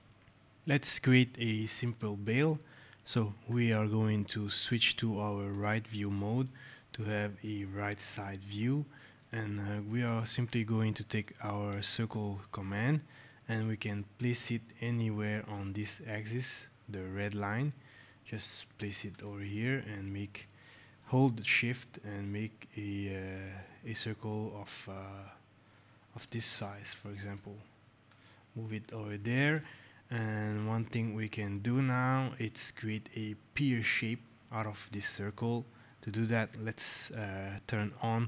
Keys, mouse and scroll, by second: 0.1 alt+scroll, 0.4 click, 1.6 right click, 2.6 right click, 5.4 click, 6.3 right click, 8.9 alt+scroll, 9.3 right click, 9.3 middle click, 10.5 alt+scroll, 11.1-11.6 scroll, 12.0 click, 19.0 click, 26.0 shift+click, 27.1 click, 28.8 click.